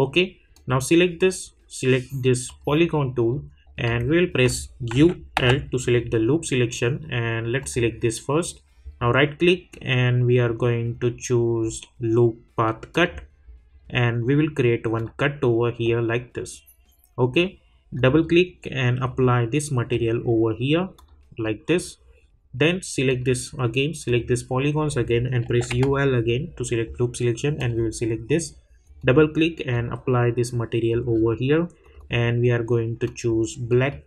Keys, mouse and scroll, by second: 0.5 click, 3.2 scroll up 1, 4.0 alt+middle click, 4.9-5.3 typing, 7.6 click, 8.8 right click, 12.9 click, 13.6 scroll up 1, 15.0 click, 17.9-20.9 drag, 25.4 u, 27.4 l, 27.6-34.0 drag.